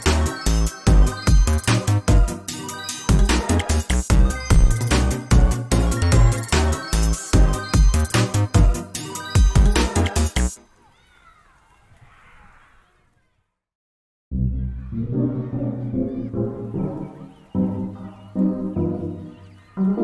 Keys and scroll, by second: 0.5 ctrl+space, 2.9 ctrl+space, 4.7 ctrl+space, 8.1 ctrl+space, 8.3 ctrl+z, 8.5 ctrl+space, 9.5 ctrl+space, 10.6 ctrl+space, 14.4 ctrl+space, 15.7 ctrl+space.